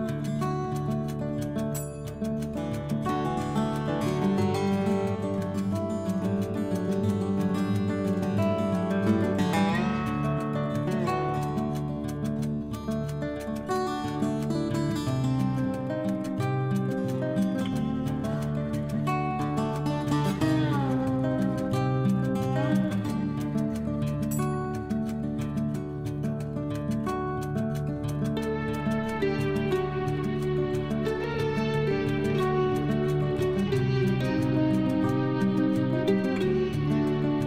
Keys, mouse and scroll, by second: 0.0-3.0 typing, 4.7-7.2 typing, 9.3-23.3 typing, 27.2-37.4 typing.